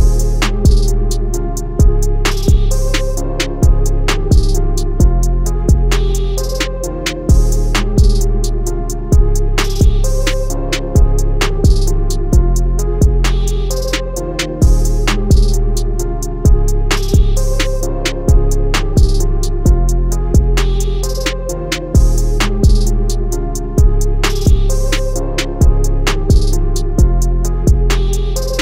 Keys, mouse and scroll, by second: 7.3 click, 8.9 click, 19.1-19.5 scroll up 2, 20.4 click, 21.6 Down, 23.5 click, 27.7-28.2 scroll down 1, 28.5 scroll down 1.